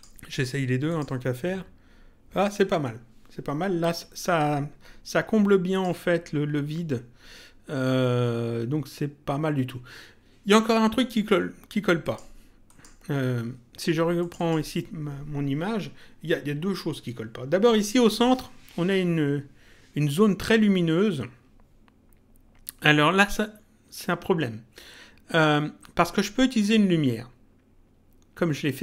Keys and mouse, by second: 5.7 click, 12.0 click, 14.1 click.